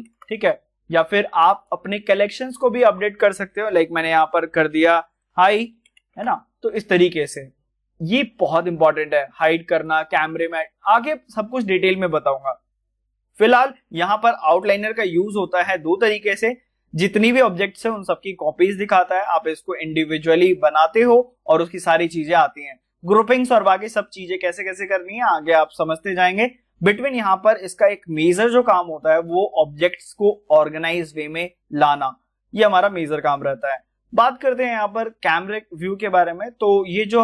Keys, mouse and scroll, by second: 0.0-0.4 typing, 1.6 click, 5.1-6.3 typing, 9.2 Return, 9.3 click, 11.6-14.3 middle drag, 37.1 middle click.